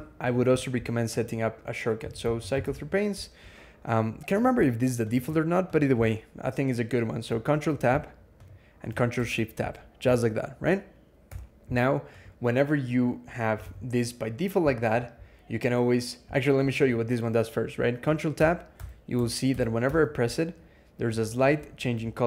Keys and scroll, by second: 1.6-3.0 typing, 7.4 ctrl+Tab, 9.0 ctrl+shift+Tab, 11.1 Escape, 13.5 alt+x, 18.2 ctrl+Tab, 18.6 ctrl+Tab, 21.1 super+=.